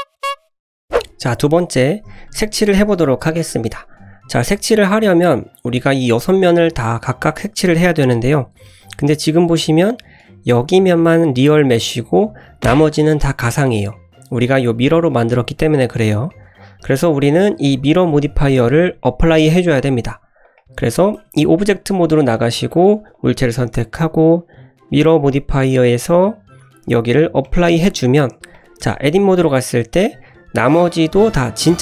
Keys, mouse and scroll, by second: 3.7 click, 6.4-6.7 middle drag, 7.3-8.6 middle drag, 8.8 click, 9.2 Tab, 9.3 middle click, 10.2 click, 10.6-11.1 drag, 11.9 middle click, 12.9 middle click, 13.9 middle click, 16.3-16.9 middle drag, 20.4 click, 21.2 Tab, 22.5 click, 23.1 click, 25.8-27.6 drag, 28.2 click, 28.5 click, 28.8 Tab, 29.2-29.6 middle drag, 30.0-30.4 middle drag, 30.7 scroll down 1, 30.8-31.5 middle drag, 31.5 scroll up 1.